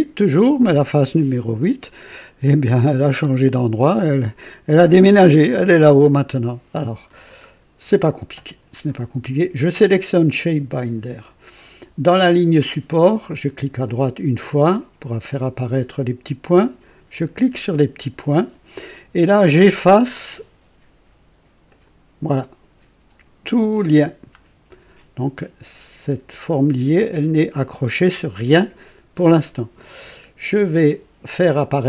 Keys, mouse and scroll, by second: 3.3 click, 5.5 click, 6.4 click, 6.6 click, 13.8 click, 17.1 click, 21.7 click, 23.7-24.9 drag, 30.0 scroll up 2.